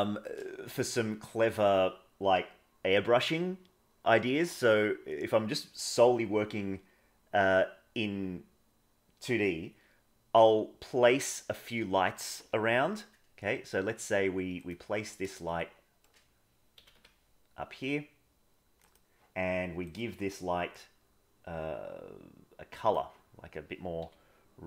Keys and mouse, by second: 12.7 shift+d, 15.5 shift+middle click, 16.7 g, 19.8 click, 24.0 g.